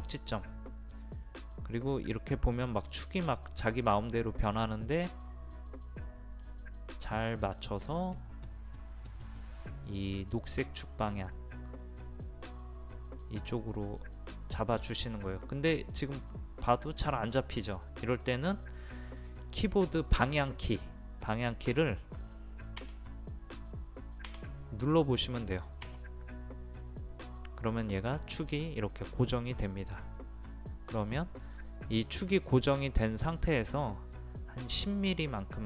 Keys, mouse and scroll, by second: 4.9 middle click, 22.8 Left, 24.3 Right.